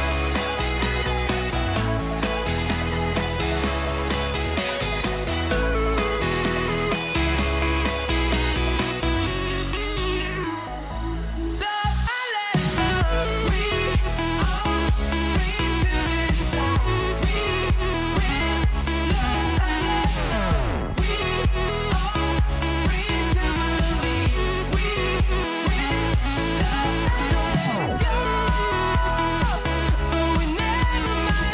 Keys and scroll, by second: 1.2 ↺, 8.4 super+c, 15.7 super+v, 16.8 super+-, 24.7 ctrl+c.